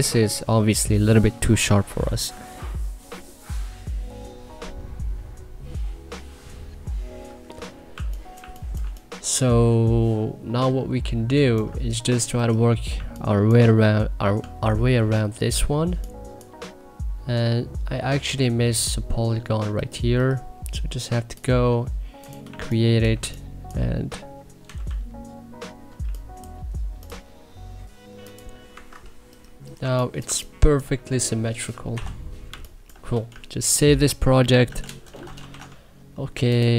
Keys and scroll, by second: 7.6-9.2 typing, 12.8 1, 13.6 2, 22.3 1, 23.1 2, 24.5 k, 25.9 3, 28.6 Escape, 29.7 2, 30.1 1, 31.8 e, 32.4 1, 34.6 ctrl+shift+s, 34.8-35.9 typing.